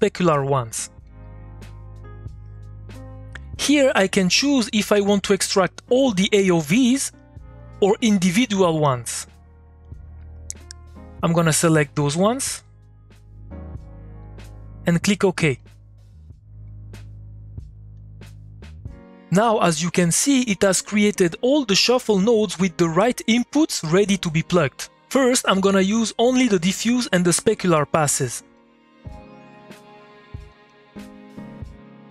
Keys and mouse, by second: 2.9-7.2 drag, 7.2 click, 9.2-11.5 drag, 11.5 click, 17.5 middle click, 18.2 click, 18.5-20.4 middle drag, 20.4 click, 23.7 click, 25.6 middle click, 25.8 click, 27.2-29.7 shift+drag, 29.7 shift+middle click, 30.1 click, 30.4 middle click, 30.6 click, 30.7 middle click, 31.2 click, 31.4 middle click, 31.7 click.